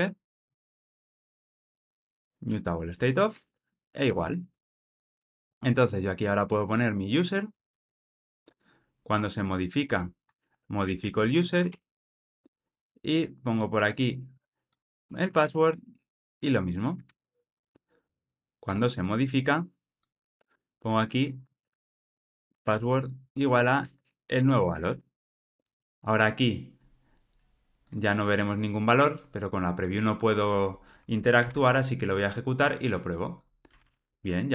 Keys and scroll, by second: 2.4 Return, 4.4 alt+super+l, 10.9 Escape, 17.0 super+z, 18.5 super+z, 18.6 Return, 23.1 Return, 24.3 Escape, 25.1 alt+super+l, 25.2 ctrl+alt+o, 31.3 ctrl+r.